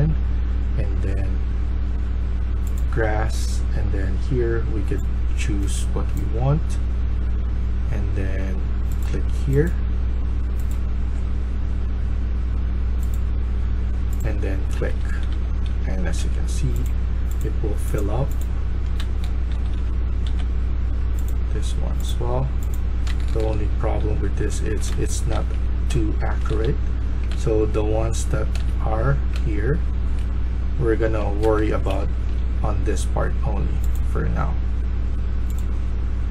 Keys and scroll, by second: 14.4-16.1 typing, 18.7-20.2 typing, 23.0-25.9 typing, 26.4 ctrl+z, 27.2 ctrl+z, 28.4 ctrl+z, 28.4 ctrl+a, 29.2 ctrl+z, 30.3-32.4 typing.